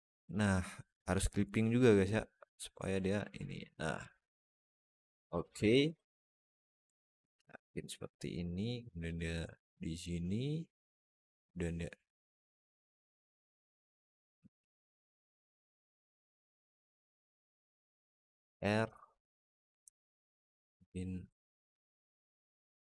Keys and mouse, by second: 1.2 click, 2.3 click, 3.4 click, 3.9-5.4 drag, 5.7-6.7 alt+middle drag, 7.3 click, 8.2-9.9 drag, 10.5 click, 11.1-14.0 drag, 14.5-16.3 drag, 16.6 Tab, 17.0 Tab, 18.0 ctrl+r, 21.7 alt+middle click.